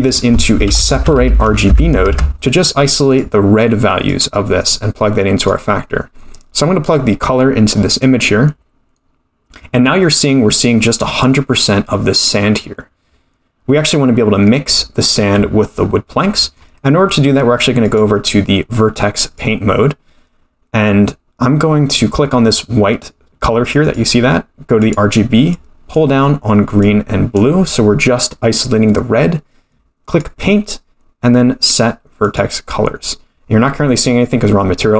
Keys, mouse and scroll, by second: 4.1-5.5 drag, 6.9-8.0 drag, 13.6-14.3 scroll down 1, 14.3-14.6 scroll down 1, 16.2-16.6 middle drag, 17.8-19.4 drag, 23.8 click, 30.1 click.